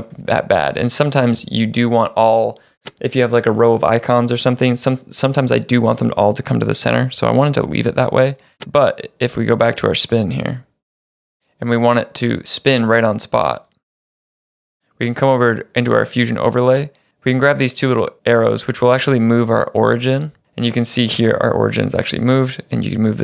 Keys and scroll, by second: 1.3 space.